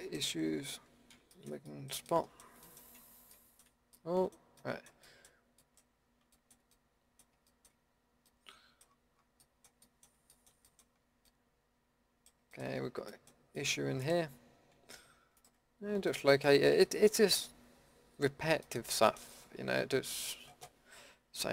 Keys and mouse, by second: 0.0-1.3 middle drag, 11.8 middle click, 14.0-19.9 middle drag, 16.7 KP_Decimal.